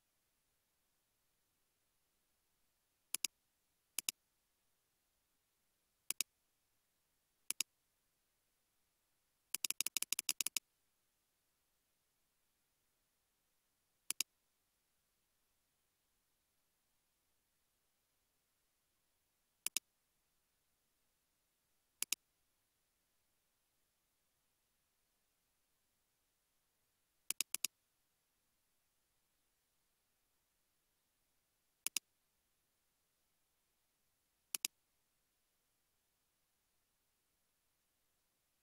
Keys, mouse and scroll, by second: 6.5 scroll down 1, 7.3 typing, 7.8-8.6 scroll down 1, 8.6 typing, 9.7 double click, 15.7-16.8 scroll down 1, 18.6-21.1 scroll up 1, 21.1 scroll, 21.3 ctrl+z, 23.7-25.1 scroll up 1, 25.1-26.9 scroll down 1, 27.6 double click, 28.1-28.7 scroll up 1, 28.7 scroll down 1.